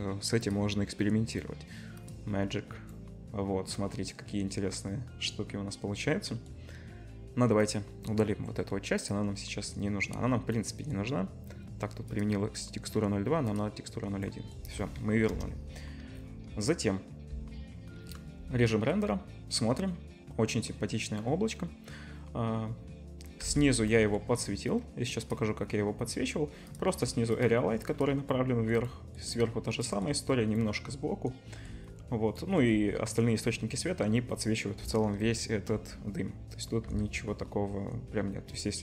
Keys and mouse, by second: 7.8-9.0 middle drag, 9.0-15.3 drag, 15.3 KP_0, 16.1-17.3 drag, 17.3 z, 17.6-24.1 drag, 23.4 z, 24.4-25.4 drag, 25.4-27.9 middle drag, 27.9-36.9 drag, 35.5 KP_0, 36.9 z, 37.8 click, 38.6 middle click.